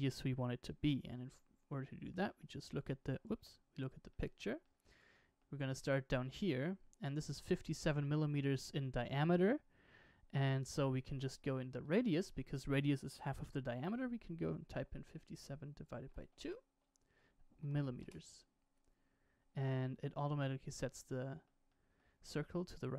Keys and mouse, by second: 1.1 KP_1, 2.2 middle drag, 3.3 KP_1, 4.2 shift+middle click, 4.7 shift+middle click, 5.2 middle click, 11.8-18.7 drag, 17.7 m, 20.9-21.4 middle drag, 21.7 shift+middle drag.